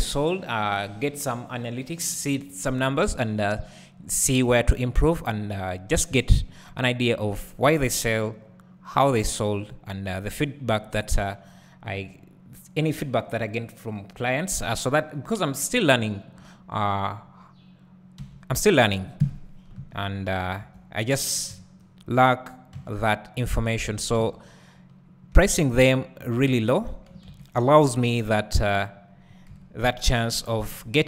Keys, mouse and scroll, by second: 0.0 click, 4.0-5.1 scroll down 1, 7.1-7.7 scroll up 1, 7.7 Tab, 9.0-16.8 drag, 18.2 `, 19.2 KP_1, 20.3 z, 20.4 click, 20.6 1, 22.0 b, 23.5 x, 23.9 Tab, 25.3 `, 26.2 scroll up 1, 26.5 `, 29.0-29.5 scroll down 1, 29.5 KP_1, 30.3-31.0 scroll down 1.